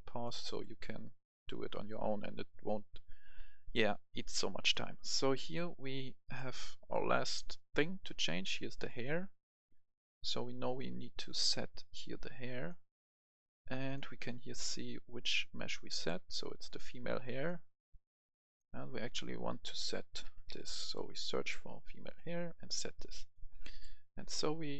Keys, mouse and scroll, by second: 8.8 click, 10.6-14.5 drag, 15.8 right click, 17.3 click, 20.1-20.6 typing, 22.0 click, 23.6 right click.